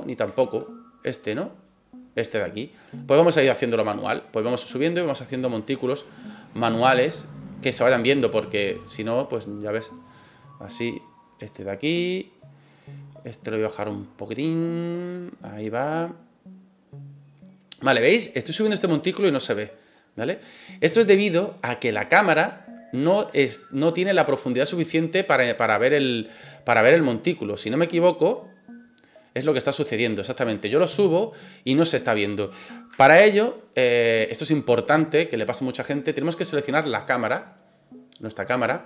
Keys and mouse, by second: 0.4 ctrl+z, 1.1 right click, 1.7-4.0 drag, 4.5 right click, 5.0-6.0 drag, 7.6 right click, 8.2-9.4 drag, 9.8 right click, 10.4-12.4 drag, 13.3 right click, 14.0 click, 14.9 right click, 15.4-26.1 drag, 30.6-32.4 drag, 33.1 ctrl+z, 37.3 click.